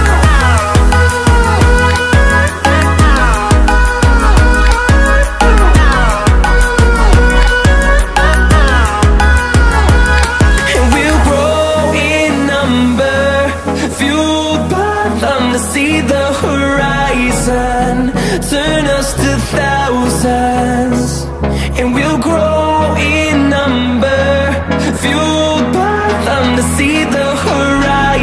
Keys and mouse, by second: 0.7 click, 1.3 space, 3.5 space, 8.1 click, 10.1 click, 14.6 click, 20.7 z, 22.9 click, 26.5 middle click, 27.3 click.